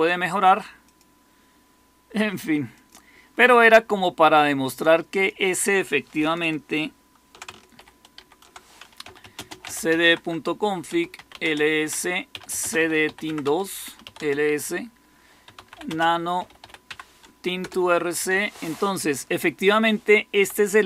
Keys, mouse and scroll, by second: 7.7 ctrl++, 8.1 ctrl++, 8.7-17.3 typing, 17.5 Return, 18.2 Down, 18.5-20.7 typing.